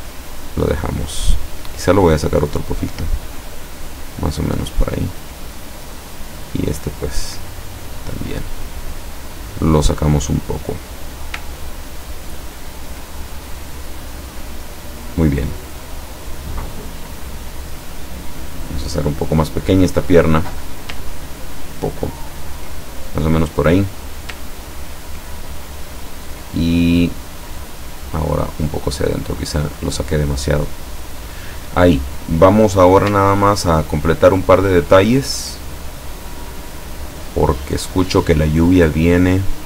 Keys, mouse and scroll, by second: 1.2-3.7 drag, 6.0 click, 7.0-9.7 drag, 11.1 click, 11.6-12.0 ctrl+scroll down 2, 12.6 ctrl+scroll down 2, 13.7-14.8 drag, 15.9 click, 16.6 click, 17.7-19.5 drag, 21.3-22.7 ctrl+drag, 25.1-25.4 ctrl+scroll up 2, 27.4-29.8 drag, 31.2 scroll down 2, 32.3 click, 33.6-34.1 ctrl+scroll up 2, 34.4 ctrl+scroll down 2, 35.7 click.